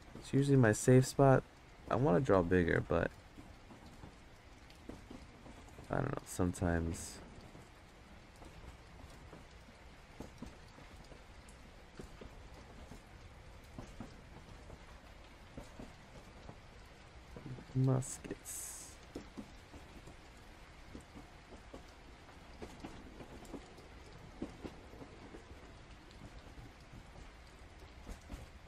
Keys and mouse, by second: 0.0 click, 1.0 ctrl+z, 2.0 click, 3.3 ctrl+z, 4.1 click, 5.0 ctrl+z, 5.4 click, 7.0 ctrl+z, 7.7 click, 8.1 ctrl+z, 9.2-11.7 drag, 12.2 click, 14.1 click, 15.8 click, 16.5 ctrl+z, 16.8 click, 18.8 click, 19.5 ctrl+z, 21.0-22.5 drag, 23.2 ctrl+z, 24.0 click, 24.6 ctrl+z, 25.4 click, 27.3 ctrl+z.